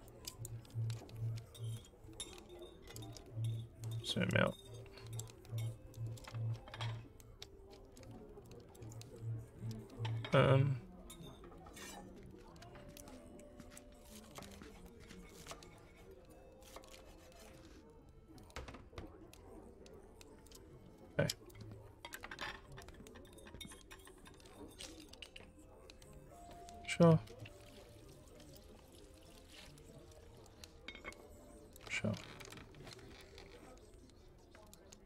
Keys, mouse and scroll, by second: 0.1 alt+click, 3.2 alt+scroll up 3, 4.0 alt+scroll up 1, 4.4 alt+middle click, 5.4 scroll up 1, 5.9 alt+middle click, 6.6 z, 8.5 alt+middle click, 16.8 click, 20.5 click, 21.5 click, 24.1-26.8 drag, 28.6-31.8 shift+drag, 32.5-35.0 alt+middle drag.